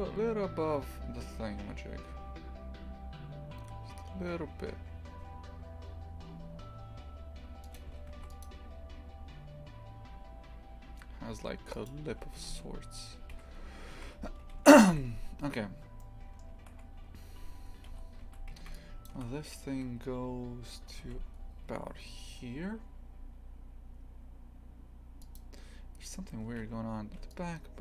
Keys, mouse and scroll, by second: 8.2 ctrl+r, 12.4 g, 14.0 shift+f, 16.0-18.0 shift+middle drag, 18.0 z, 19.1 shift+click, 20.9 g.